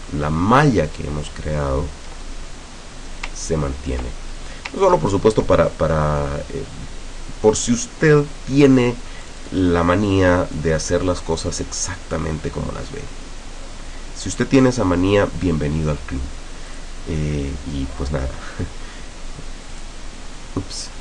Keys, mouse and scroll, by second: 1.8 ctrl+scroll down 2, 2.2-3.3 ctrl+middle drag, 5.2 ctrl+scroll down 2, 9.3 click, 10.6-14.9 drag, 16.8 click, 19.8 click.